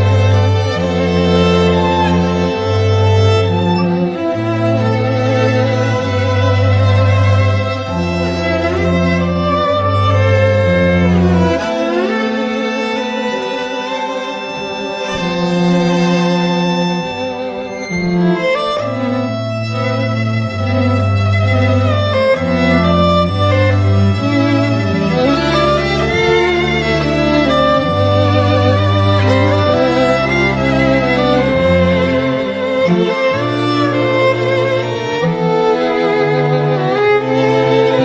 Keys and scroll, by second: 0.1 ], 8.5 x, 10.6 [, 11.2 [, 11.4 [, 11.7 [.